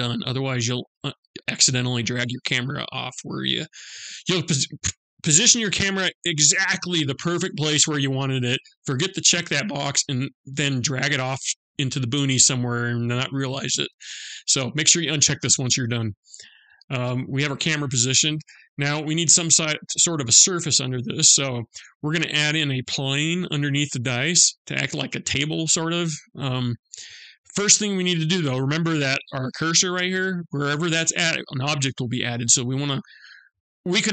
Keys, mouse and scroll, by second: 15.1 click, 15.8-16.2 scroll down 2, 15.9 scroll up 1, 16.2 middle click, 17.1-18.0 scroll down 5, 18.0 middle click, 19.1-19.9 scroll up 6, 21.0-21.6 scroll up 2, 21.6-22.0 scroll down 1.